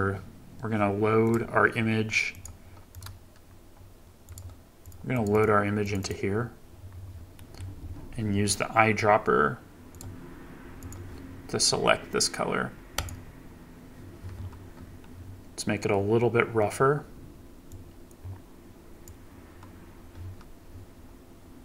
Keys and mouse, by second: 7.4 click, 9.9 click, 17.8-19.2 drag.